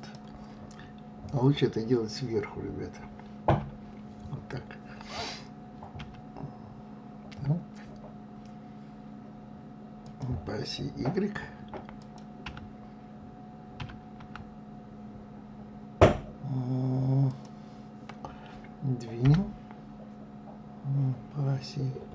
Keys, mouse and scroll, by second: 3.0 KP_7, 4.0 scroll down 4, 5.6 s, 11.6 click, 12.0 y, 13.4 s, 18.8 g.